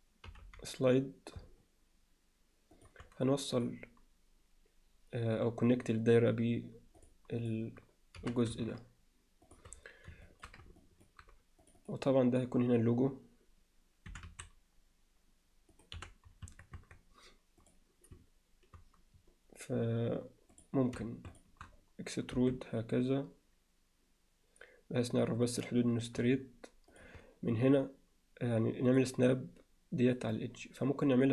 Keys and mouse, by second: 0.3 g, 3.6 click, 7.4 click, 8.2 g, 10.3 alt+shift+middle click, 10.8 ctrl+middle click, 11.6 click, 11.8 click, 14.1 e, 16.0 f, 16.5 Tab, 16.8 Tab, 17.6 click, 20.5 click, 22.4 e.